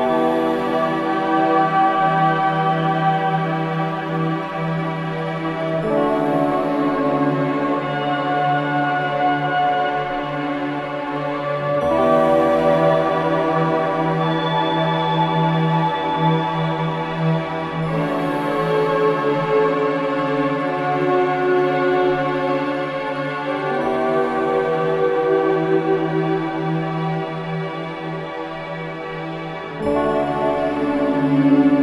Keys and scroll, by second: 27.6 ctrl+j.